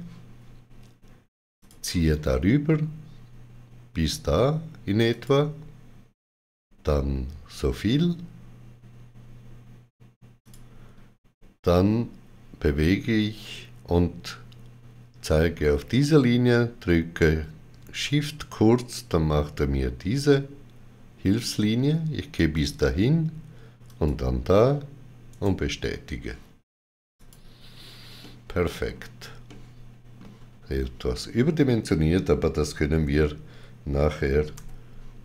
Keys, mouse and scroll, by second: 1.4 click, 5.0 click, 10.3 click, 17.6 click, 22.4 click, 25.2 right click, 27.0 click, 29.3 shift+middle click, 34.4 3.